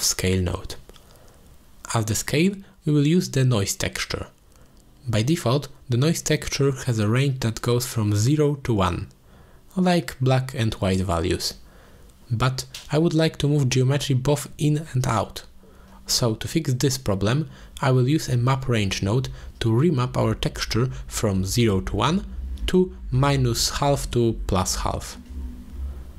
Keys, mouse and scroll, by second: 3.8 drag, 4.2 middle click, 4.8-9.4 drag, 10.3 click, 11.5 click, 13.5 click, 14.8-19.0 drag, 19.6 click, 21.6-26.1 drag.